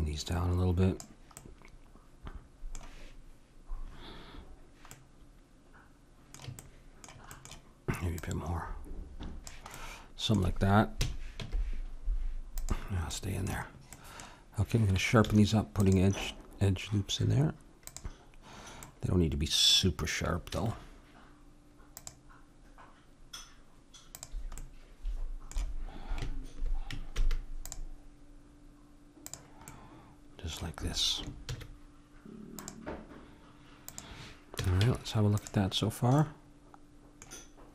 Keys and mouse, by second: 1.4-4.1 middle drag, 5.0-8.2 middle drag, 8.2-11.0 drag, 11.0 middle click, 11.0 a, 11.4 Tab, 13.2-15.7 middle drag, 15.3 ctrl+r, 19.2-23.8 middle drag, 20.5 ctrl+r, 24.6-26.4 drag, 27.2 ctrl+r, 29.7-31.5 drag, 31.5 ctrl+r, 34.6 a, 34.8 Tab, 36.2-37.7 middle drag.